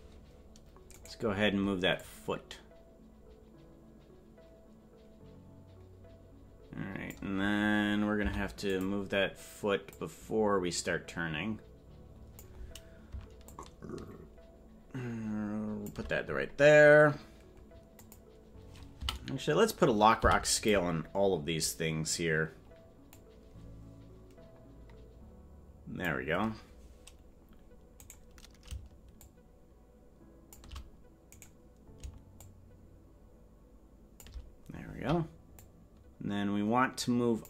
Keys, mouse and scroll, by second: 2.0-7.2 drag, 2.0 right click, 10.0-12.5 drag, 10.0 i, 13.4-15.9 shift+drag, 18.0 click, 20.2 a, 20.2 i, 23.2-26.1 drag, 27.2 scroll down 2, 28.7 right click, 29.2-30.6 shift+drag, 31.4 right click, 32.4-34.3 shift+drag, 35.6-37.4 drag.